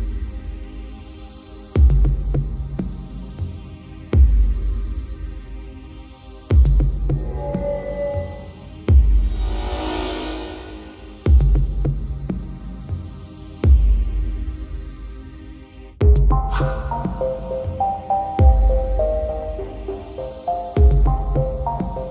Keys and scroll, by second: 2.5 ctrl+=, 3.6 ctrl+-, 4.4 ctrl+0, 17.1 ctrl+j.